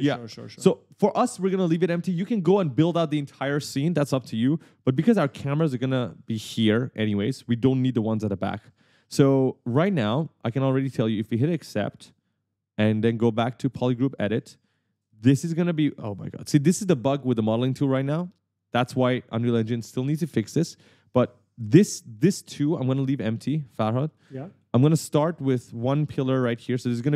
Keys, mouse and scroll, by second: 1.7 right click, 4.6 right click, 12.0 click, 13.9 click, 14.4 right click, 15.4 shift+click, 20.9 shift+click, 22.4 click, 24.2 click, 25.2 shift+click, 26.4 click, 27.0 shift+click.